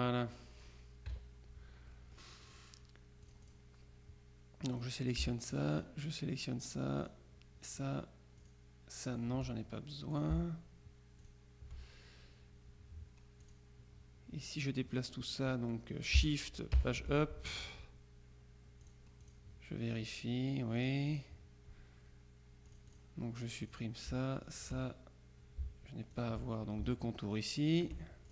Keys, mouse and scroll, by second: 0.1 click, 1.2 KP_Subtract, 2.0 click, 3.3 click, 4.8 click, 5.8 shift+click, 7.1 click, 8.5 click, 9.2 click, 10.2 shift+click, 11.3 shift+click, 13.5 click, 16.8 shift+Page_Up, 18.9-19.9 drag, 20.9-21.8 drag, 22.8-23.5 drag, 23.7 click, 24.5 shift+click, 26.2 shift+click, 27.8-28.3 drag.